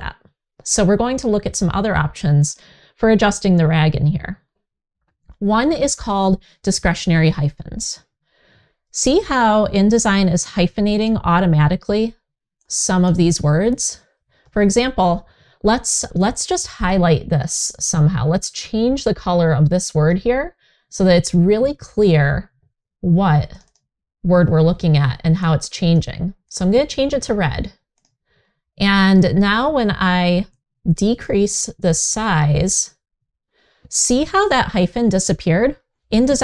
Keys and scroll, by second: 14.1 super+z.